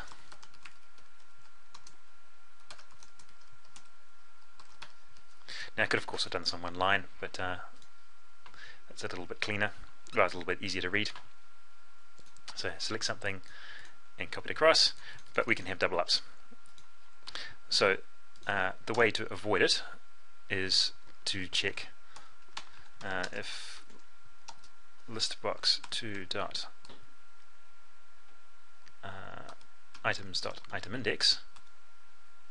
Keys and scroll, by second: 24.0 ctrl+space.